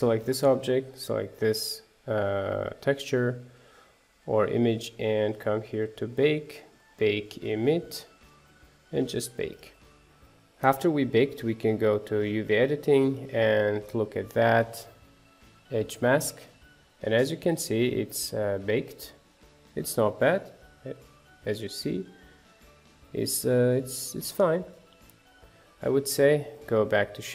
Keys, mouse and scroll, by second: 0.2 click, 0.8 click, 7.9-10.0 drag, 13.6-17.9 drag, 24.9 click, 25.5 scroll down 1, 25.7 middle click, 26.5 click.